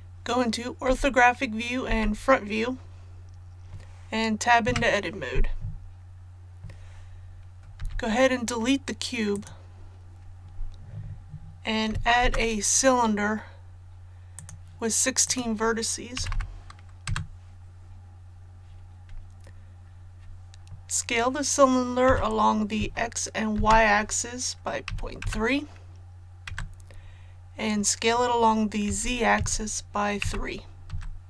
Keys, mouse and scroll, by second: 0.9 KP_5, 1.9 KP_1, 4.6 Tab, 7.8 x, 9.3 click, 12.2 shift+a, 14.3 click, 16.2 KP_1, 16.3 KP_6, 22.1 s, 23.5 shift+z, 24.9 KP_Decimal, 25.2 KP_3, 28.9-30.2 typing.